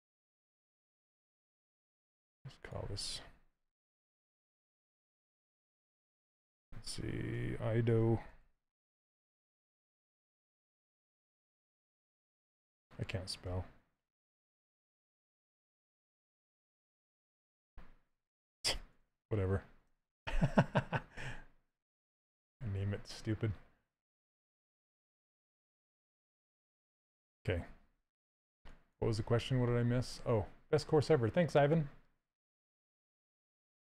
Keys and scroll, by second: 3.2-4.9 typing, 7.0 Home, 8.0 d, 8.2 o, 9.2 Right, 11.4 s, 13.1 BackSpace, 16.9 t, 17.3 s, 18.6 BackSpace, 19.5 Return.